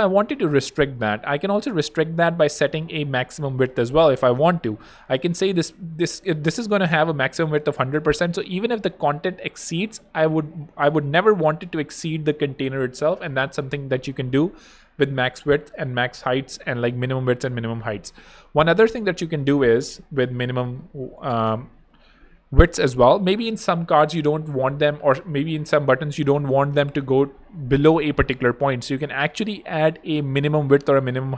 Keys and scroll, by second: 20.0 super+Return, 20.3-22.0 typing.